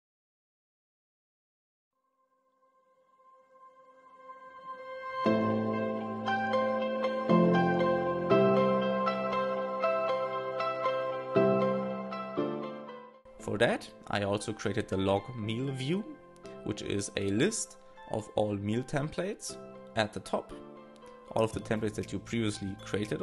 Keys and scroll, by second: 4.6 shift+i, 16.2 super+c, 17.8 shift+f, 18.3 shift+s, 19.6-21.1 typing, 22.9 shift+9.